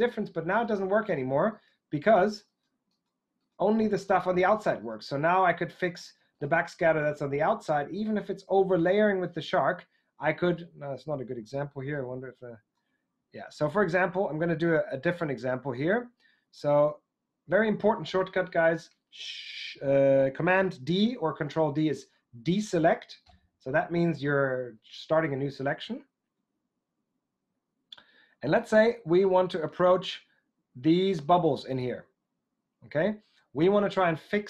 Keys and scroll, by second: 22.4 super+d.